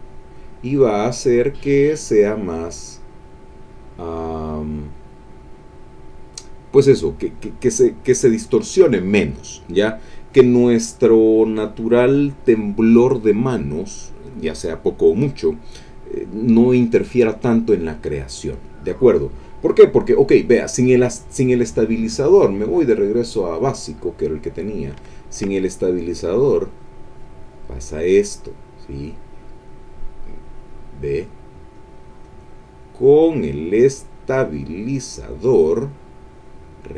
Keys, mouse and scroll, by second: 0.9-2.6 drag, 3.2-4.7 drag, 5.0-6.3 drag, 22.2 click, 23.4 click, 25.1 ctrl+middle click, 26.0 click, 26.4 click, 26.7-27.7 drag, 28.9-30.4 drag, 30.7 click, 31.7 click, 32.6-35.3 drag.